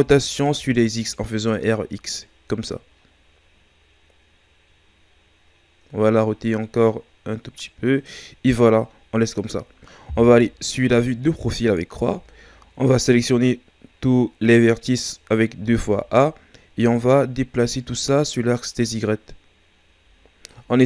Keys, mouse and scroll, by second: 10.8 KP_3, 12.1 a, 15.6 a, 16.9-19.9 drag.